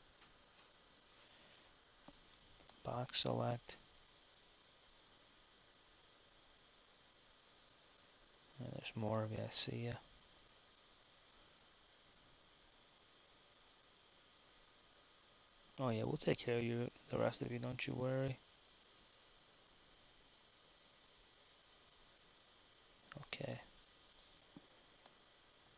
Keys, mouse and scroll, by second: 0.0 z, 1.1 Tab, 2.3 b, 5.9 g, 9.0 b, 11.5 g, 16.8-19.2 middle drag, 21.4 z, 22.0 z, 24.5 b.